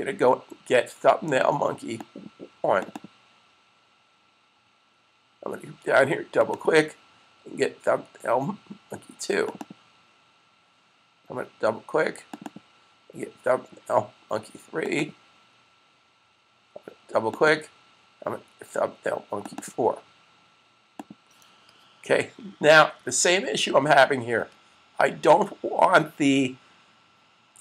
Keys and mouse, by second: 1.7 click, 2.8 double click, 6.4 double click, 9.4 double click, 12.1 click, 12.5 double click, 19.2 click, 19.4 double click, 20.8 click, 22.9 super+s.